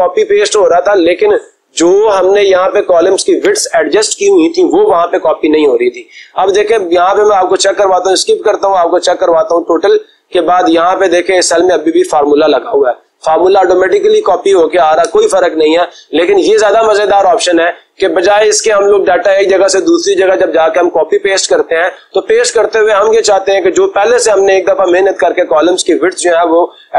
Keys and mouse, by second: 6.5-7.5 drag, 8.0 Escape, 9.4 click, 10.2 click, 11.4 click, 11.6 click, 14.9 Escape.